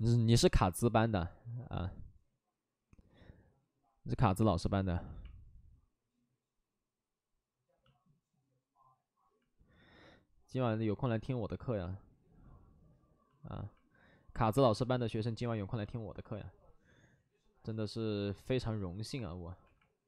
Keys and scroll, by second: 0.3 w.